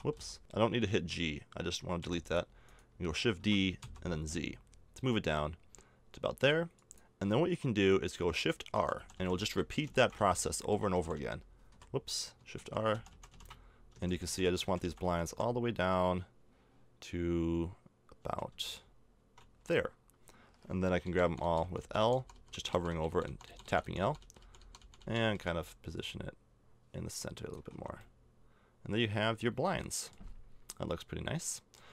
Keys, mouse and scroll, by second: 2.0 x, 2.6-5.2 right drag, 3.3 shift+d, 8.7-9.9 typing, 10.9 r, 12.5-15.2 typing, 18.2 shift+r, 18.5 shift+r, 20.8-25.3 typing, 25.9-27.5 drag, 27.5 a, 27.7 Tab, 31.5 middle click, 31.8 Tab.